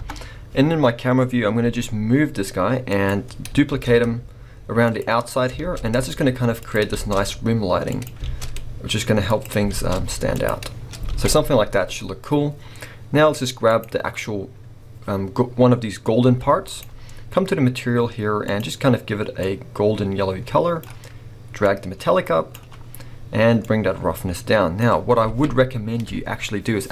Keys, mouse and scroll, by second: 0.9-1.6 scroll down 2, 1.6 g, 3.1 click, 3.7 shift+d, 5.0 click, 5.6 shift+d, 6.7 click, 7.0 shift+d, 8.0 click, 8.3 shift+d, 9.4 click, 9.8 shift+d, 10.4 click, 10.7 scroll down 1, 11.1 alt+a, 11.8-12.5 scroll up 1, 13.9 click, 16.2 g, 16.8 right click, 19.4 click, 21.7-26.9 drag, 25.3 alt+a.